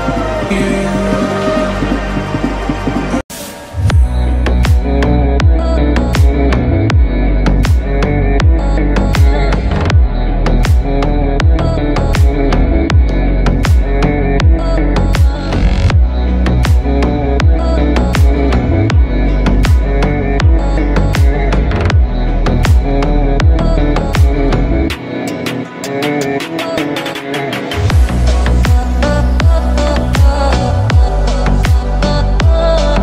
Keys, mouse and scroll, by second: 7.8 click, 10.3 click, 12.2 click, 19.4 click, 19.7-20.1 alt+scroll up 2, 20.1 space, 20.3 click, 20.7 space, 21.9 click, 29.3 right click, 30.2 click.